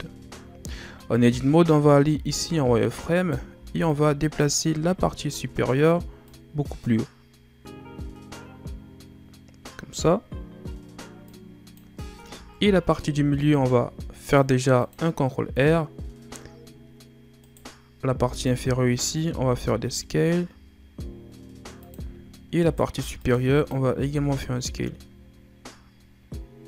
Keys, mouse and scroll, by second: 0.2-1.5 shift+scroll up 2, 1.5-2.2 shift+scroll up 2, 2.2 z, 3.1 right click, 3.5 b, 4.8-6.3 ctrl+scroll up 3, 6.3-9.3 drag, 11.3 click, 12.1-13.0 scroll down 4, 13.0 ctrl+r, 15.3-17.4 scroll down 2, 17.4 right click, 18.2 b, 19.3 s, 22.6 right click, 22.9 b, 24.1 s.